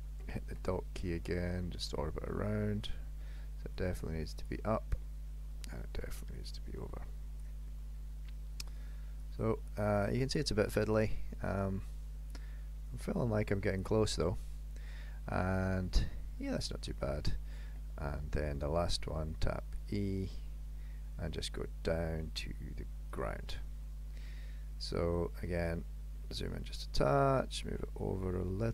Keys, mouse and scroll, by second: 0.6 KP_Decimal, 1.3-1.8 scroll down 3, 1.8-2.2 scroll down 11, 2.2 middle click, 3.9 click, 6.4 click, 7.7 middle click, 9.3 click, 10.7 middle click, 13.0 click, 14.1 middle click, 16.6 middle click, 17.7 KP_3, 19.2 e, 23.6 middle click, 25.5-26.2 scroll up 3, 25.9 shift+middle click, 27.1 click.